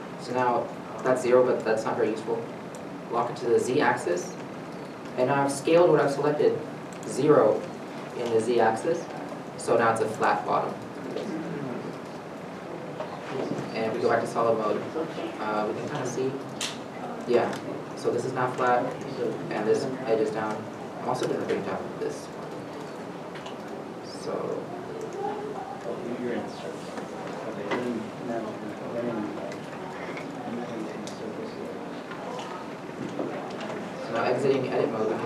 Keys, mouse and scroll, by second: 3.9 0, 4.1 z, 13.1 z, 14.2 middle click, 17.8 3, 18.6 middle click, 19.6 1, 20.9 1, 21.5 scroll, 21.8 middle click, 21.9 g, 24.6 a, 26.1 z, 26.5 middle click, 27.2 alt+a, 29.4 s, 29.7 0, 30.3 z, 30.8 Return, 31.4 middle click, 31.7 z, 32.2 middle click, 32.9-33.4 scroll, 33.4 middle click.